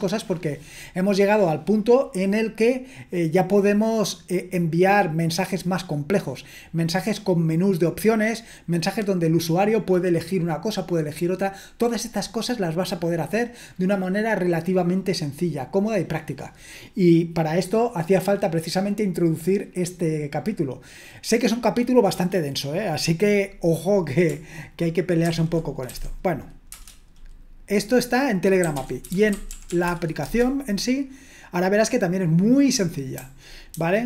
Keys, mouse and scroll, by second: 25.7-26.4 typing, 26.7 Return, 28.4-30.2 typing, 33.1-34.0 typing.